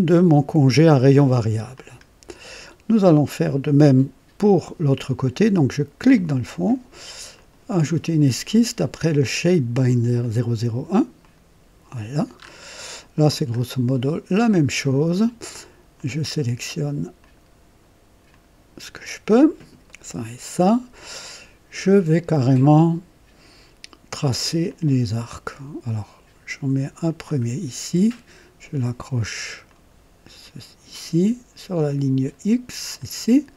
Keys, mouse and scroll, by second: 1.7 click, 5.9 click, 7.3 click, 10.1 click, 11.2 click, 12.3 scroll up 2, 12.8-13.4 right drag, 13.4 scroll up 1, 13.9-14.8 right drag, 15.9 click, 17.1 click, 18.3 click, 19.8 right click, 24.6 click, 27.0 click, 29.6 click, 32.9 click.